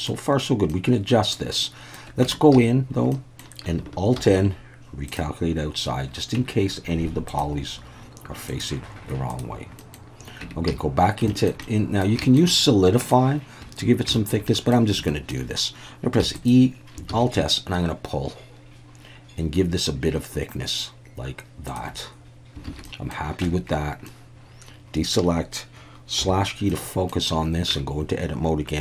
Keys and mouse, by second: 0.7-1.4 middle drag, 1.6-1.9 middle drag, 2.2 Tab, 2.5 a, 3.1 middle click, 4.2 alt+n, 6.4 Tab, 7.3-9.5 drag, 9.8 middle click, 10.4 Tab, 10.7 a, 11.3 shift+middle click, 11.6 middle click, 12.2 shift+middle click, 12.5 middle click, 14.1 shift+middle click, 14.5 middle click, 15.1 shift+middle click, 16.2 e, 16.4 click, 17.1 alt+s, 21.7 shift+click, 22.7 alt+a, 22.9 middle click, 23.4 Tab, 24.1-25.2 middle drag, 26.2 /, 26.7-27.1 middle drag, 27.7 Tab.